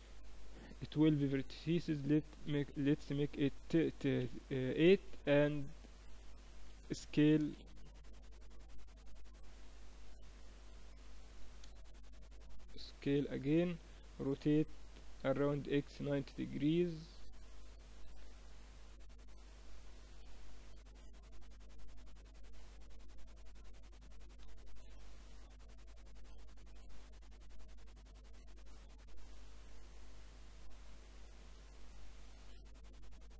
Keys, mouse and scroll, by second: 1.3-3.3 drag, 3.9 t, 5.0-6.9 drag, 6.9 s, 11.1 s, 13.9 r, 16.5 click, 17.7 KP_7, 18.7 z, 19.2-21.5 middle drag, 21.5-23.3 drag, 23.9 KP_3, 26.5-31.7 middle drag, 31.7 KP_1, 33.1-33.3 drag.